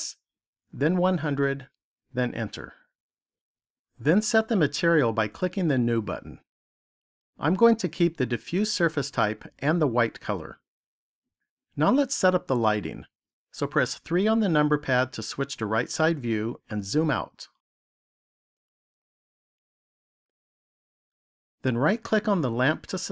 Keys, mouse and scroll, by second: 5.6 click, 13.9 KP_3, 15.7-17.1 scroll down 3, 17.3-19.5 scroll down 4, 19.5 shift+middle click, 22.4 right click.